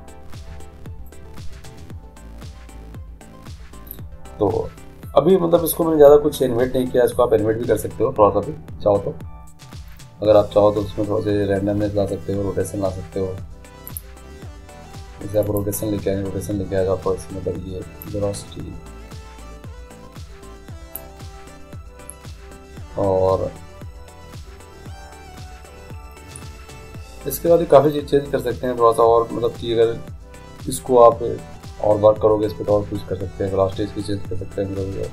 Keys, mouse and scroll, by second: 9.5-14.7 middle drag, 14.7-17.6 drag, 18.4-20.0 drag.